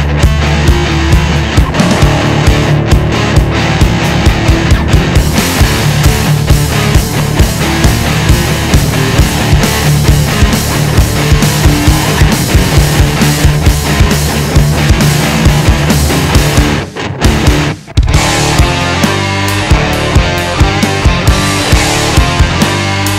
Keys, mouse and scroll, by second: 0.2 ctrl+shift+click, 5.2-7.6 middle drag, 7.6 click, 8.6 ctrl+shift+click, 10.9 ctrl+shift+click, 16.7 KP_1, 17.1-19.2 middle drag, 19.2 shift+click, 20.5 ctrl+shift+click, 22.0 shift+click, 23.0 ctrl+shift+click.